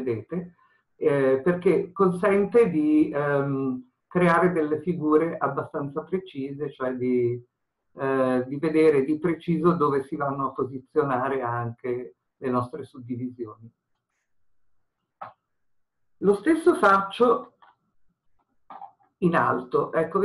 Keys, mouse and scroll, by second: 17.5 ctrl+r.